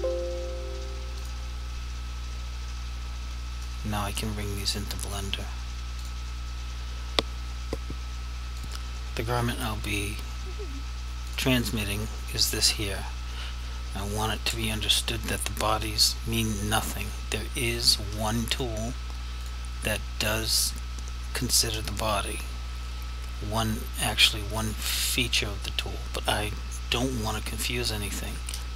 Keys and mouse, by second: 3.8 click, 6.1 click, 11.3 click, 18.6 click.